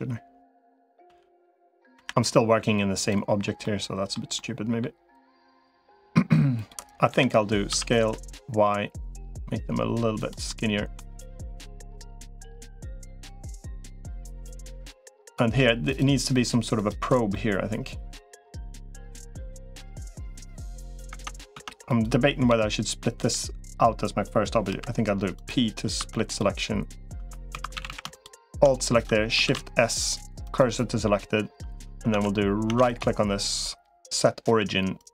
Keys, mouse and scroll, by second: 0.9 l, 1.7 Delete, 3.4 middle click, 4.1 middle click, 5.3 click, 5.7 middle click, 6.9 l, 7.5 s, 10.3 middle click, 11.4-12.5 middle drag, 12.9 middle click, 13.9 middle click, 17.1-18.3 middle drag, 18.9-20.8 middle drag, 20.9 Tab, 21.3 Tab, 21.7 click, 22.3 l, 23.1 l, 24.5 p, 25.9 Tab, 26.1 click, 27.1 Tab, 27.5 2, 27.5 a, 27.7 a, 27.9 alt+shift+click, 29.3 shift+s, 31.5 Tab, 31.9 Tab, 32.5 Tab, 32.7-35.1 right drag.